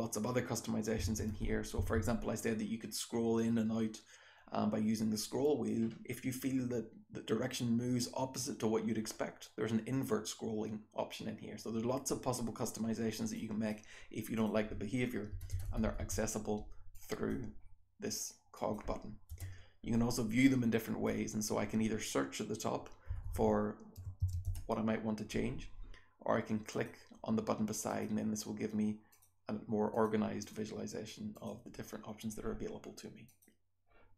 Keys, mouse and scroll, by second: 5.8-6.3 scroll up 1, 6.3-34.1 scroll down 1.